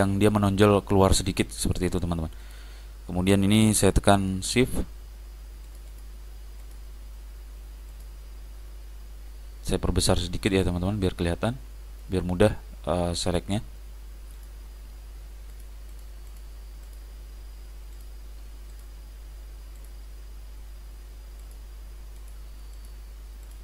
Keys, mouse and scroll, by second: 2.5 click, 5.7-9.7 drag, 8.7 middle click, 9.6-12.3 middle drag, 13.4-23.6 drag.